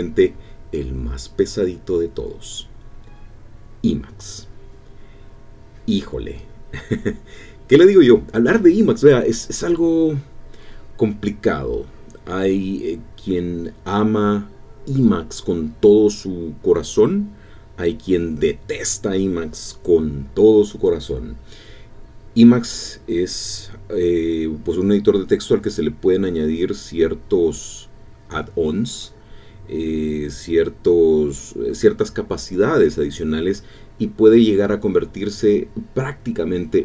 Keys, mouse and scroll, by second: 9.8-11.3 typing.